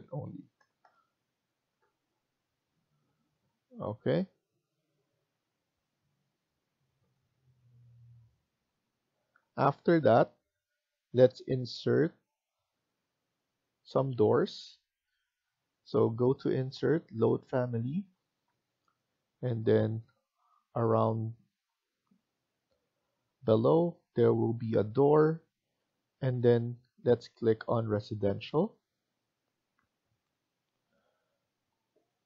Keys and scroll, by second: 0.0-2.9 typing, 6.1 Escape, 6.1 typing, 6.6 Escape.